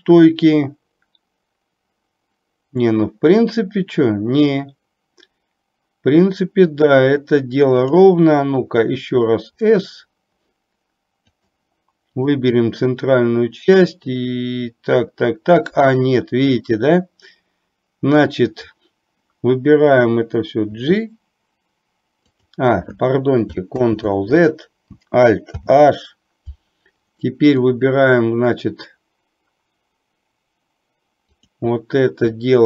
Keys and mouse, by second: 7.9 click, 12.2 click, 23.9 ctrl+z, 25.6 alt+h, 27.2-27.7 middle drag, 31.5 click.